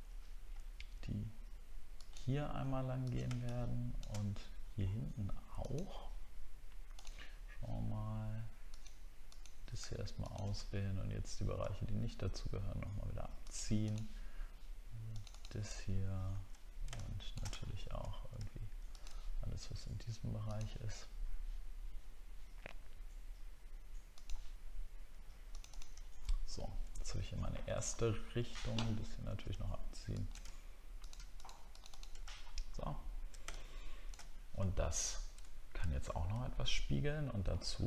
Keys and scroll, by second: 0.6 alt+scroll up 1, 17.6 alt+scroll up 6, 26.1-26.7 alt+scroll down 2, 27.8 alt+scroll up 1, 28.9 alt+scroll up 1, 32.3 alt+scroll down 1, 33.1 alt+scroll down 1, 35.6-36.6 alt+scroll down 1.